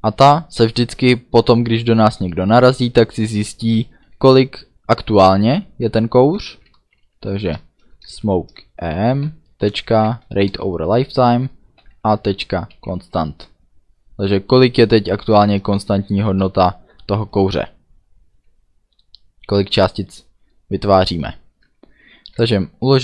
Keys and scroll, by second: 6.2-7.4 typing, 8.0 Return, 9.2-10.6 typing, 11.8 ., 12.7 c, 15.3 Return, 16.4 ;, 22.4 ctrl+s.